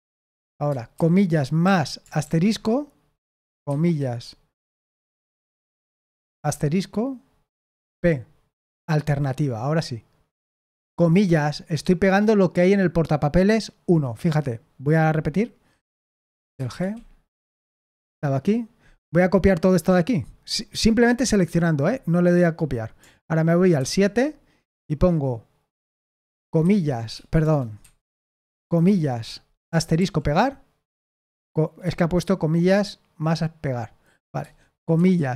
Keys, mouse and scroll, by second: 0.9-2.2 typing, 7.9 typing, 15.9-17.2 typing, 18.0 super+8, 23.7 super+7, 25.8-27.4 typing, 28.5 typing, 29.9 typing.